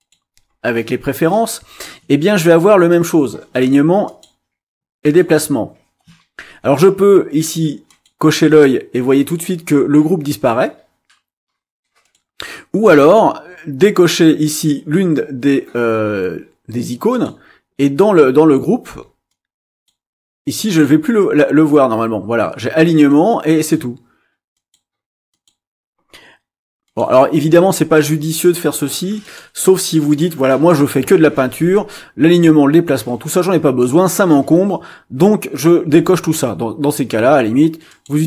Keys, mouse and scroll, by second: 2.9 click, 4.1 click, 5.0 click, 7.9 click, 12.0 click, 17.1 click, 19.3 click, 20.5 click, 21.3-23.9 drag, 24.5 click, 25.3 click, 26.8 click, 29.2 click, 37.9 click.